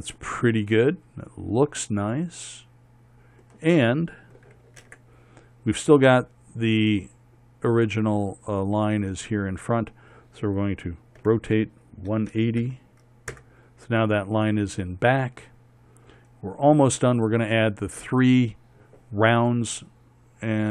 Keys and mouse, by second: 0.2 Tab, 5.5 ctrl+KP_7, 11.9 r.